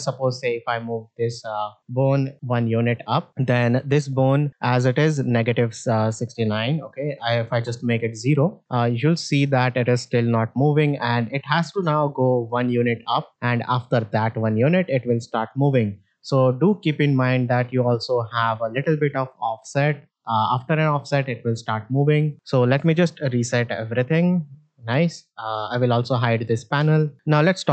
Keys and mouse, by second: 0.6-2.9 drag, 7.6 click, 8.6 shift+middle click, 9.2 middle drag, 10.7 click, 11.0-15.9 drag, 19.6-22.3 drag, 22.7 a, 23.8 alt+g, 24.0 alt+r, 24.8 shift+middle drag, 25.9 n, 26.7 shift+middle drag.